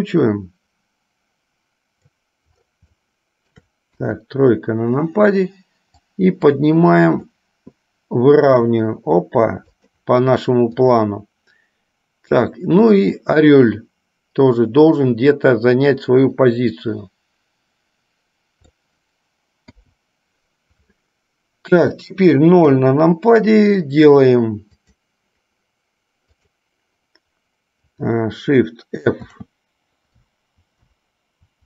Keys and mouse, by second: 3.2 shift+middle click, 4.2 KP_3, 6.1-7.5 drag, 8.6 r, 10.8 click, 13.0-19.0 drag, 19.8 i, 22.8 KP_0, 25.0 click, 26.6 click, 29.3 shift+f.